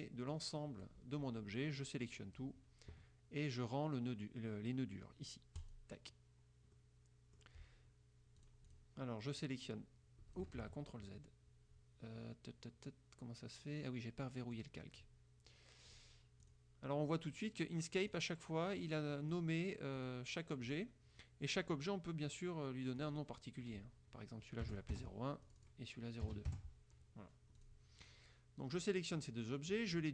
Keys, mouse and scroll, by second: 0.4 click, 2.0 click, 5.7 click, 6.8 click, 8.5-9.0 drag, 9.5-10.7 drag, 10.7 ctrl+z, 14.6 click, 16.0 click, 16.5 click, 18.2 click, 18.8 click, 19.5 click, 20.1 click, 20.8 click, 23.2 click, 24.8 KP_0, 25.1 KP_Enter, 25.6 click, 26.4 KP_0, 26.6 KP_Enter, 27.8 click, 28.2-29.1 drag, 29.4 click.